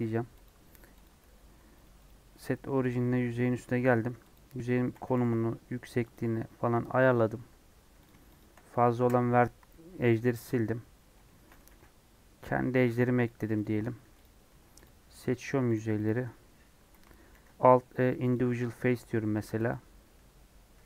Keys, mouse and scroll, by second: 0.5 Tab, 0.9 click, 1.2 g, 2.8 right click, 3.0 s, 5.0 s, 6.7 Tab, 7.1-7.8 scroll up 2, 7.8 2, 8.0 click, 8.4 shift+click, 8.9 ctrl+x, 10.3-11.6 shift+middle drag, 11.6 ctrl+r, 14.0 3, 14.2 click, 14.8 shift+click, 15.2 shift+click, 15.7 shift+click, 16.0 shift+click, 18.3 alt+e, 20.1 2.